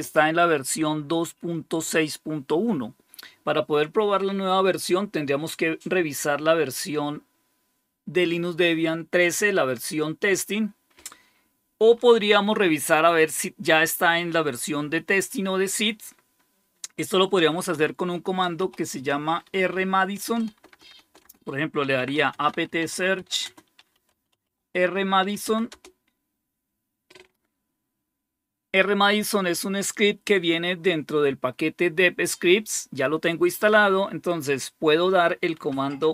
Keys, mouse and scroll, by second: 0.6 typing, 17.0-26.1 typing, 29.1 typing, 35.9-36.1 typing.